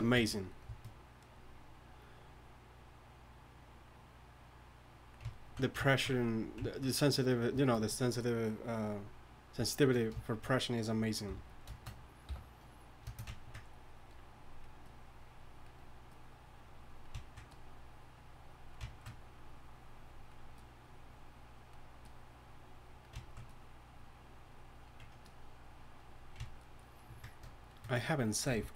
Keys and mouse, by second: 11.3 f, 12.3 y, 14.4-17.3 drag, 19.0-26.5 drag, 26.6-28.7 drag.